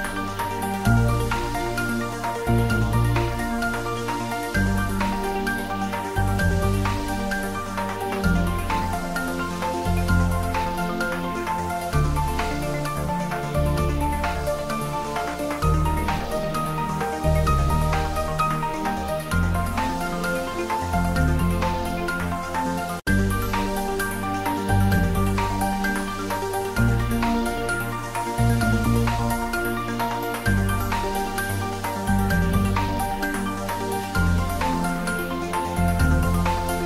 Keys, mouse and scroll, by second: 0.4 ctrl+middle click, 1.1 ctrl+s, 2.7 click, 3.3 h, 5.8 h, 6.0 ctrl+s, 6.7 ctrl+s, 8.1 alt+h, 8.5 shift+middle click, 9.4-10.7 drag, 10.7 shift+middle click, 11.2 ctrl+middle click, 11.6 ctrl+s, 14.6 h, 15.7 alt+h, 16.3 ctrl+middle click, 17.3 ctrl+middle click, 18.2 click, 20.9 click, 22.5 click, 25.6 3, 26.1 ctrl+s, 26.4 ctrl+middle click, 27.5 ctrl+s, 32.4 ctrl+s, 32.9-34.4 ctrl+middle drag, 34.4 click.